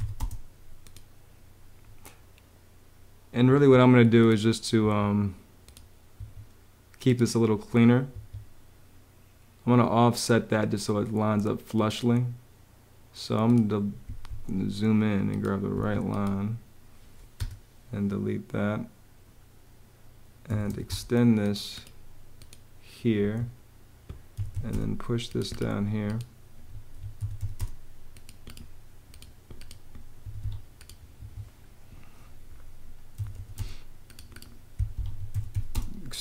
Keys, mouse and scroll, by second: 0.0-0.2 typing, 3.2 ⟲, 4.5 ↶, 5.9 ↶, 7.8 ↶, 14.0 Escape, 15.4 Escape, 17.1 BackSpace, 19.9-20.9 typing, 22.9 Escape, 23.8-24.7 typing, 26.4 Escape, 26.6-27.6 typing, 29.9 Escape, 31.2 Escape, 32.6-33.5 typing, 34.6 Escape, 34.8-36.2 typing.